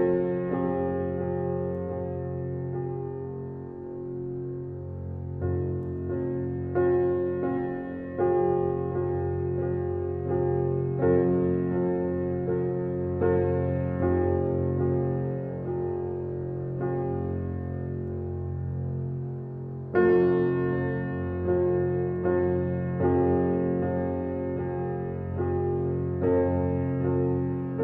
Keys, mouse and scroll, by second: 0.7-1.9 drag, 1.9 KP_0, 9.0 click, 10.0 click, 11.3 click, 12.3-13.3 drag, 13.9-15.8 drag, 19.1 scroll down 1, 19.5 click, 20.0-20.5 scroll down 10, 20.9-22.8 drag, 23.7 click, 24.1 click.